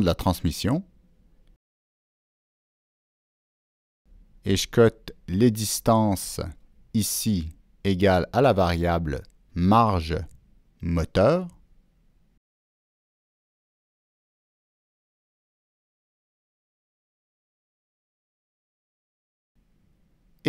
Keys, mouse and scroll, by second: 1.1 right click, 3.1 right click, 4.2-6.2 drag, 4.3 right click, 8.2 Escape, 9.2 Escape, 9.7 right click, 9.8 Escape, 10.9 click, 11.0 Escape, 11.0 right click, 12.2 click, 12.4 Escape, 12.4 right click, 12.9 click, 15.5 Down, 16.0 Return, 17.8 click, 19.8 Return, 19.8 click.